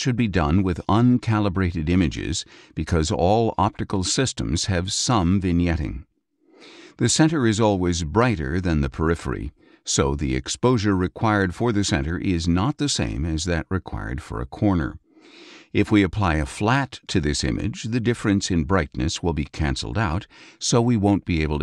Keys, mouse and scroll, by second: 7.7 click, 9.0 click, 11.5 click, 14.1 click, 15.5 click.